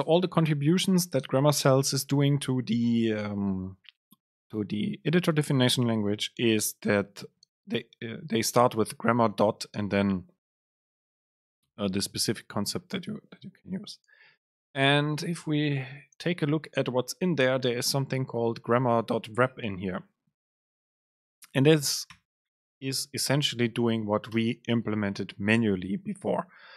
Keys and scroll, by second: 23.0 super+space.